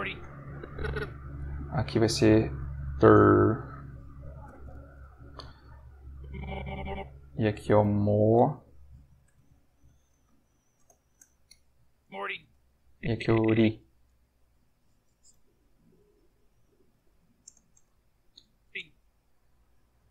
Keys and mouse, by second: 0.5 click, 1.9-4.4 typing, 4.6 Return, 6.1 click, 7.8 m, 8.9 m, 10.2 shift+o, 10.8 shift+Return, 12.0 space, 12.9 click, 15.3 m, 16.1 ctrl+m, 16.7-17.6 typing, 18.6 space, 20.0 space.